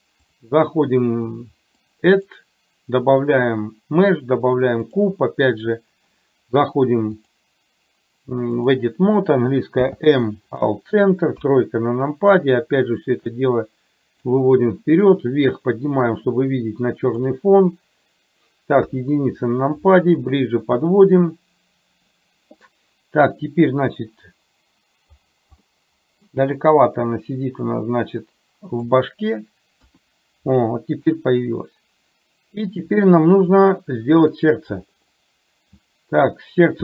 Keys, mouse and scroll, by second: 0.3-1.9 drag, 2.3-5.0 drag, 7.2-8.8 drag, 9.8 m, 11.4 KP_3, 12.8-14.3 drag, 15.2-17.3 drag, 18.9 KP_1, 20.0 shift+middle click, 25.9 middle click, 27.9-29.0 drag, 29.8 KP_1, 31.3-32.9 drag, 33.7-34.7 drag.